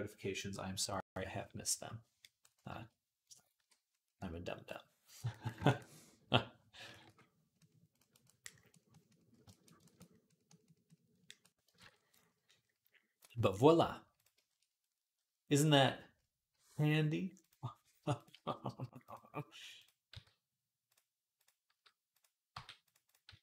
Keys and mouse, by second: 3.4 j, 5.2 ctrl+right click, 5.5-14.0 drag, 6.7 ], 6.9 ], 11.6 ctrl+Tab, 14.0-21.2 shift+middle drag, 16.3 g, 18.1 g, 19.9 s, 21.2 click, 21.5-22.8 middle drag, 21.5 s, 22.3 g, 22.8 click, 22.9-23.4 middle drag, 23.1 s.